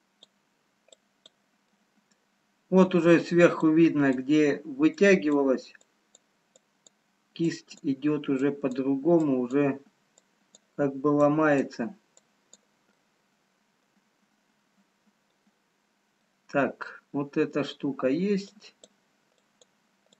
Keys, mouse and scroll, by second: 1.7 click, 1.7 middle click, 3.8 click, 5.1-13.3 click, 13.3 middle click, 16.1 middle click, 19.6 click.